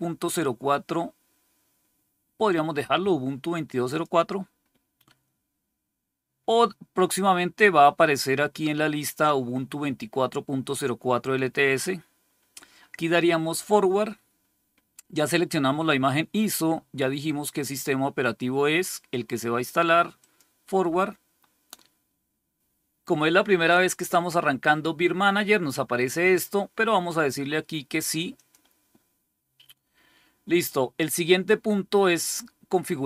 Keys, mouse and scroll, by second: 3.8 click, 20.0 click, 28.2 click.